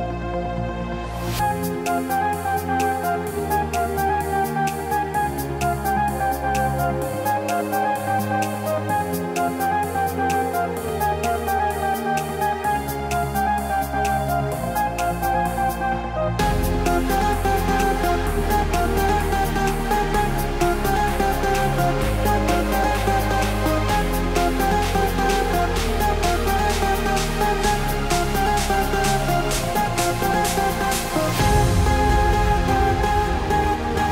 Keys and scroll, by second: 2.2 ctrl+BackSpace.